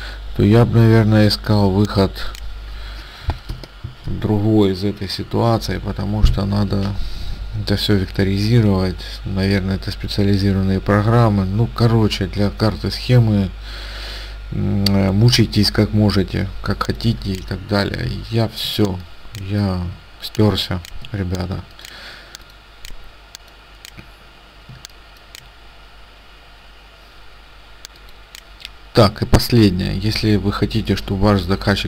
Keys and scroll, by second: 18.8 ctrl+space, 20.5 space, 24.8 space.